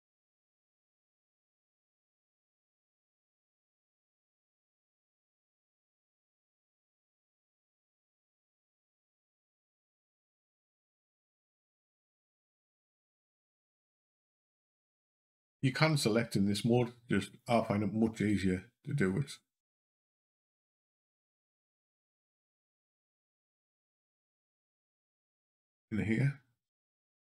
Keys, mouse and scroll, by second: 2.2 click, 3.3 Up, 6.2 Down, 6.6 Down, 14.8 click, 19.6 c, 22.1 click, 23.3 c.